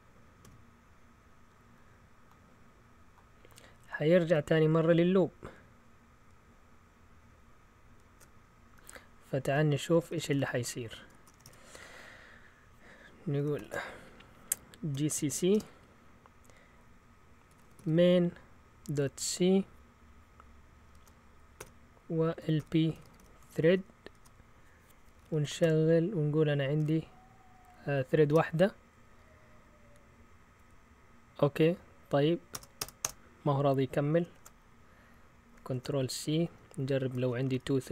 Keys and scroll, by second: 9.8-11.8 typing, 13.5 ctrl+l, 14.7-15.7 typing, 17.2-19.7 typing, 20.9-27.2 typing, 28.2 Return, 33.0 Return, 33.0 Return, 34.3 shift+super+z, 35.7 ctrl+c, 36.4 Up, 37.1 BackSpace, 37.4 2, 37.8 Return.